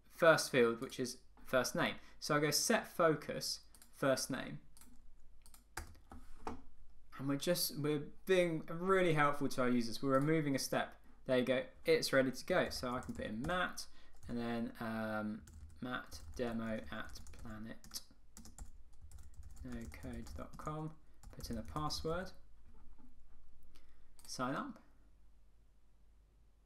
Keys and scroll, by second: 5.9 Return, 13.6 Tab, 20.7 Tab.